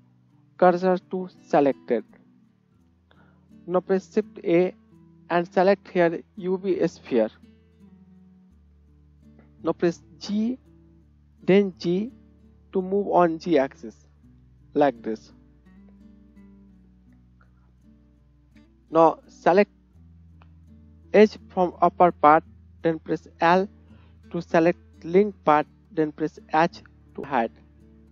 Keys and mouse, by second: 4.0 shift+click, 4.2 shift+a, 7.4-22.5 right drag, 21.2 click, 21.2 middle click, 22.5-28.1 drag, 23.7 l, 27.2 h.